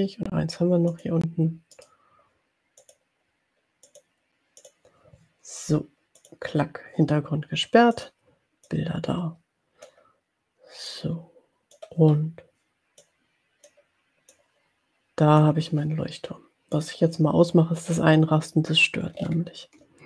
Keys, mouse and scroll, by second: 0.9 click, 1.7 right click, 2.8 click, 3.7 click, 4.7 click, 6.2 click, 7.9 click, 8.7-10.1 drag, 10.8-11.9 drag, 13.0 click, 14.3-15.9 drag, 16.9 click, 19.2-19.6 ctrl+scroll up 2.